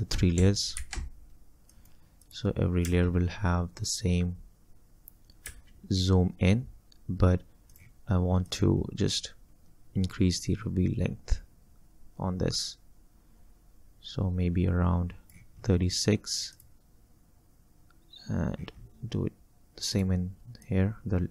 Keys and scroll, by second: 0.8 ctrl+shift+v, 2.9 space, 5.5 space.